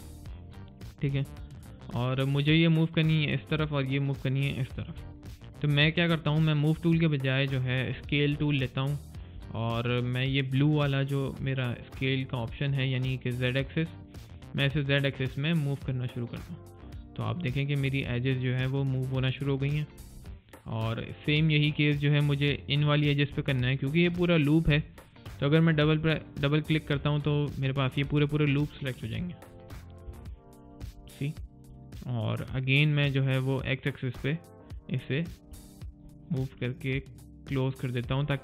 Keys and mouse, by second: 1.1 alt+click, 1.5 alt+right click, 1.8 alt+click, 4.9 alt+right click, 5.2 alt+click, 5.6 alt+middle click, 6.0 alt+click, 14.6 alt+click, 31.3 right click, 31.6 click, 35.5 alt+middle click, 35.9 alt+right click, 36.5 alt+click.